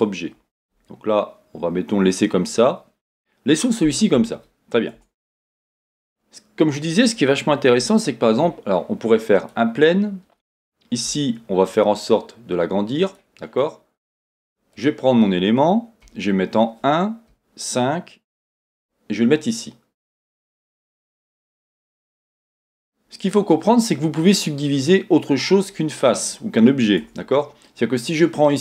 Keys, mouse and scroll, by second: 5.0 Tab, 5.5 scroll down 1, 5.9 scroll up 1, 6.5-7.8 scroll down 1, 7.8 shift+a, 9.8 scroll down 1, 11.2 s, 13.1 click, 13.4 scroll down 1, 14.7 click, 16.0 KP_1, 17.4 KP_5, 18.3 g, 20.1 click, 20.5 scroll down 1, 21.2 middle click, 21.7 scroll up 1, 22.4-25.8 middle drag, 23.2-23.7 scroll up 1, 23.7-25.4 scroll down 1, 25.4-25.8 scroll up 3, 27.0 Tab, 27.3-28.6 scroll up 2, 27.6-28.6 middle drag.